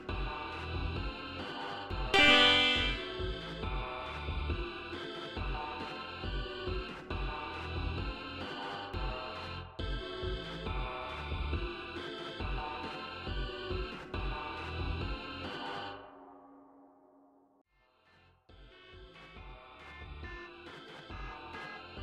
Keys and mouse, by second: 1.9-3.1 drag, 3.6 right click, 5.4 click, 6.4-8.1 drag, 9.0 click, 11.1 click, 12.4 g, 16.5 right click, 21.7 click.